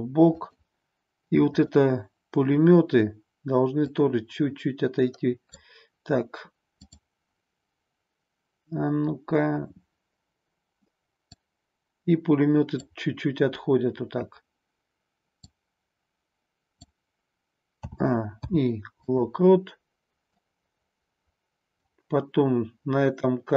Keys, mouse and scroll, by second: 0.4 click, 1.4-5.7 drag, 6.8-9.8 drag, 11.3-12.9 drag, 15.4-17.0 drag, 17.9 a, 18.3 i, 20.4-21.9 drag.